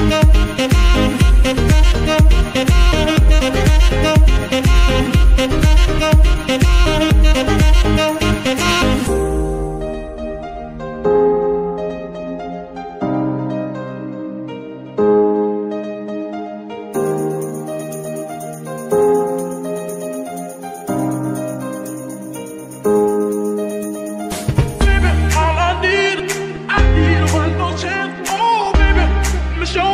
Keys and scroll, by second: 3.5 g, 3.6 z, 6.2 g, 6.3 y, 14.6 KP_1, 15.8 z, 17.3 g, 27.2 g, 29.5 Escape.